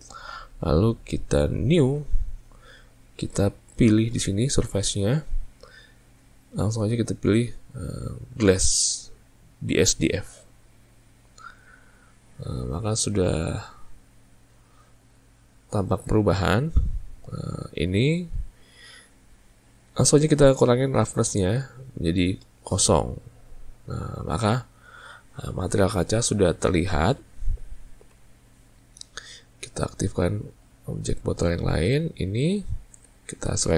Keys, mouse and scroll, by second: 5.1-8.1 drag, 22.2-25.5 drag, 30.4 click, 32.4 click.